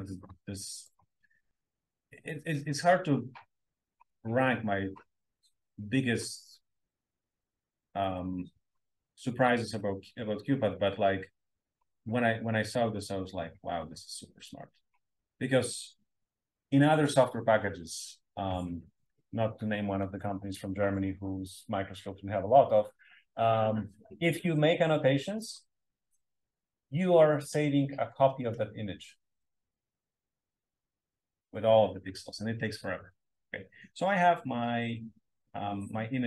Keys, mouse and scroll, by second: 7.9 click, 12.6-13.5 drag, 14.4 click.